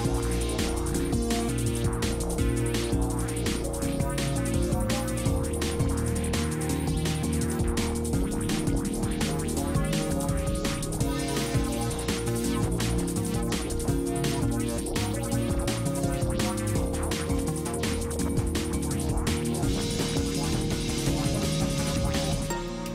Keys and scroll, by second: 3.0 space, 11.4 space.